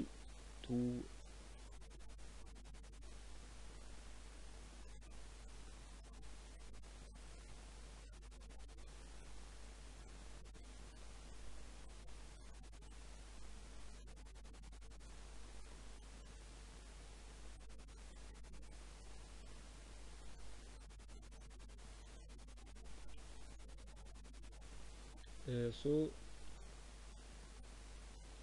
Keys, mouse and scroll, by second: 1.3 r, 4.7 s, 5.4 z, 6.7 z, 10.3 ctrl+3, 11.4-14.1 drag, 13.3 Tab, 13.9 ctrl+r, 14.1-15.1 middle drag, 15.6 middle click, 16.1 ctrl+r, 18.7 ctrl+r, 21.3 Tab, 22.0 Tab, 22.7 ctrl+r, 24.3 Tab, 25.4 Tab, 26.1 ctrl+r, 27.9 ctrl+r.